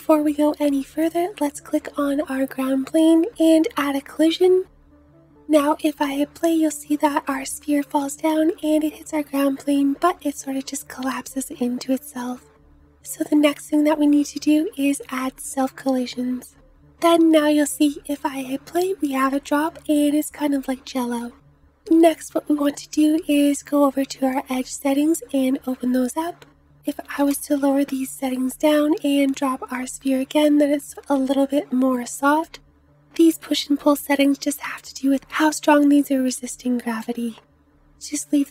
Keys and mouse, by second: 4.0-5.4 middle drag, 5.5 space, 8.5-13.3 drag, 12.4 space, 13.3-17.3 middle drag, 17.3-22.1 drag, 17.8 space, 22.0 space, 22.1-33.4 middle drag, 28.4 space, 31.4-37.1 drag, 31.4-33.4 right drag, 32.4 space.